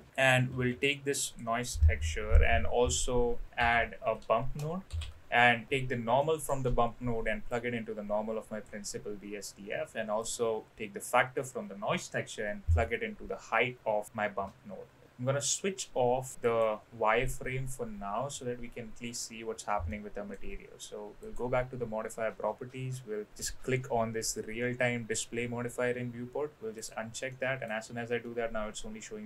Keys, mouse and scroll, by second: 0.5 shift+a, 6.3 middle click, 7.4-8.7 drag, 10.2-14.0 drag, 15.0-19.0 middle drag, 19.8-20.3 middle drag, 21.2 click, 26.8 click, 27.2-27.6 middle drag, 28.2-29.2 middle drag.